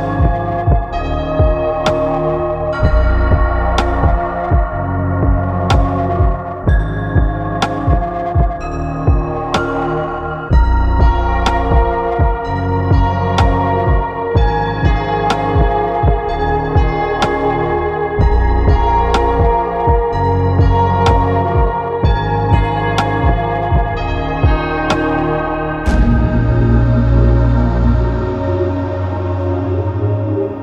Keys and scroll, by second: 18.4 Escape, 19.1 alt+Up, 22.1 ctrl+Up.